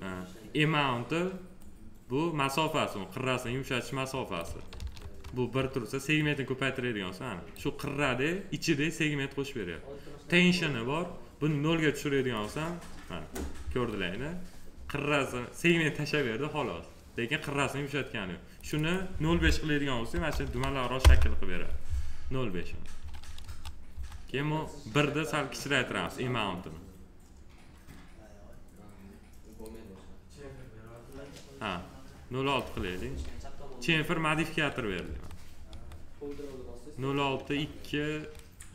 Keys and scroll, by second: 4.7 ctrl+z, 20.1 0, 21.0 Return, 23.4 F4, 35.0 F4.